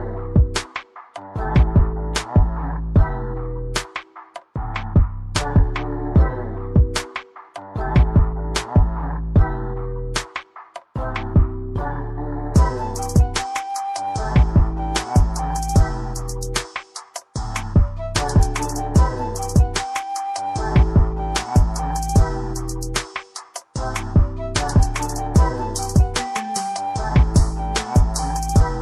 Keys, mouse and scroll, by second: 0.6 scroll down 1, 1.4 click, 11.0 click, 12.3 scroll down 1, 12.7 scroll up 1, 14.9 click, 26.6 scroll up 1, 27.1 scroll down 1, 28.1-28.8 scroll down 1.